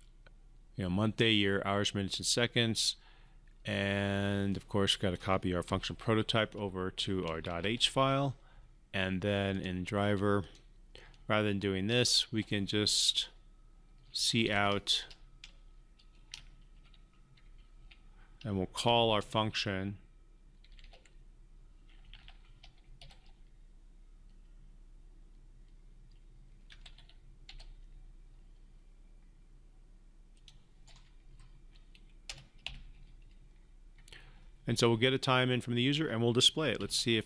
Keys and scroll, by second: 5.5 ctrl+c, 7.3 ctrl+v, 36.7 ctrl+F5.